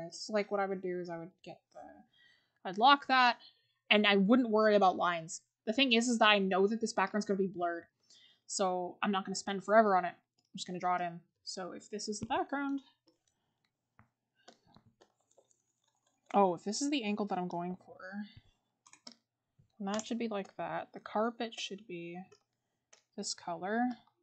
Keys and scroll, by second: 3.1 scroll, 10.8 scroll.